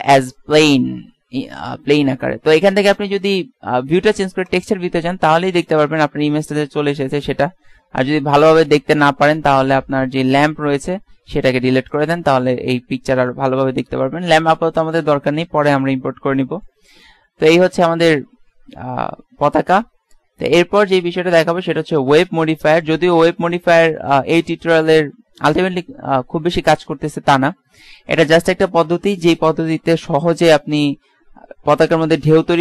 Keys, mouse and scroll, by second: 5.5 middle click, 11.6 x, 17.6 KP_1, 18.3 KP_3, 18.8 KP_5, 22.1-23.5 drag.